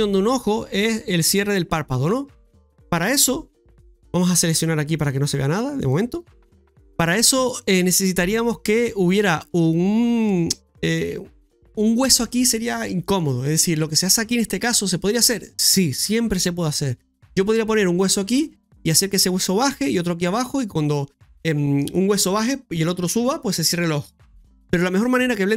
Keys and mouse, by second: 2.3 shift+middle click, 4.9 click, 5.7 click, 6.4 middle click, 7.2 shift+middle click, 12.6 middle click.